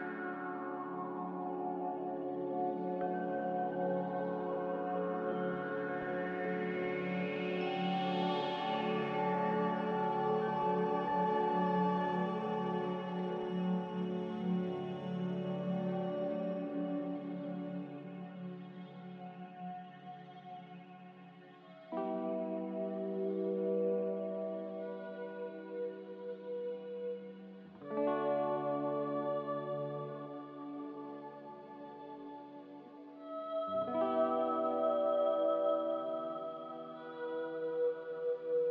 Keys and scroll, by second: 2.9 typing, 11.7 z, 19.6 ctrl+z, 25.3 Delete, 28.6 b, 31.2 ctrl+z, 36.6 a.